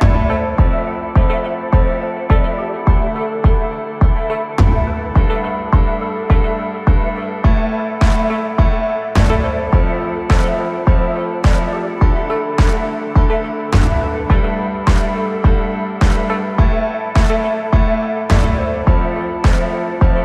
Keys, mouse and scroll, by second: 0.9 KP_1, 2.0 click, 2.3-3.0 scroll up 2, 3.0 g, 6.6-8.5 middle drag, 8.5 click, 9.0-9.3 scroll down 2, 9.3-10.8 middle drag, 10.8 KP_1, 12.8 KP_1, 13.5 ctrl+KP_3, 14.7 KP_1, 19.6 click.